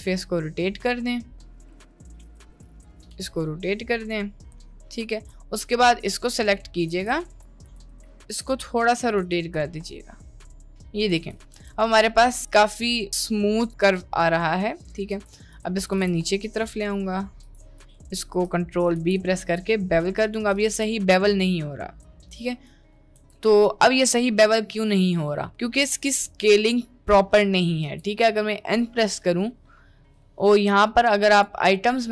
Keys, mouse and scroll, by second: 1.8 ctrl+z, 1.9 ctrl+z, 2.0 ctrl+z, 2.3 g, 2.6 g, 3.1 r, 6.0 click, 6.9 1, 7.3 click, 8.1 ctrl+b, 8.2 t, 9.3 r, 11.7 Tab, 15.2 Tab, 15.8 click, 16.1 g, 17.9 click, 19.0 ctrl+b, 20.6 ctrl+b, 23.2 Tab, 23.6 middle click, 24.8 middle click, 25.6 middle click, 26.0 Tab, 26.6 Tab, 27.6 middle click, 27.8 n.